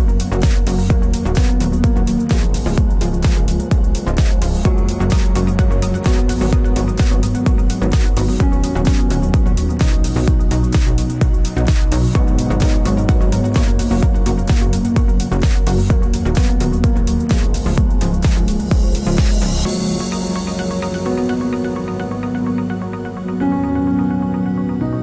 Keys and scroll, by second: 1.6 ctrl+t.